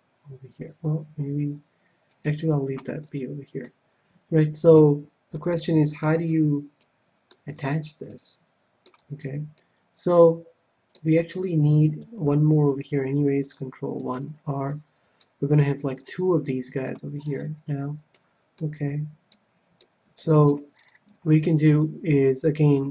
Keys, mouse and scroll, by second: 2.2-3.7 right drag, 3.0-11.3 middle drag, 9.0 KP_1, 12.1 ctrl+r, 14.1-15.7 right drag, 15.1-22.9 middle drag.